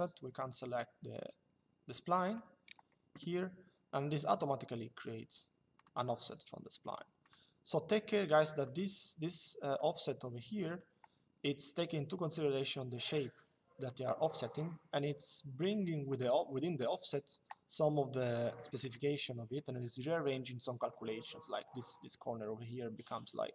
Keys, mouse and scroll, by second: 2.0 click, 4.1 click, 5.5 click, 6.9 click, 8.4 click, 12.0 click, 13.5 click, 15.3 click, 18.0 middle click.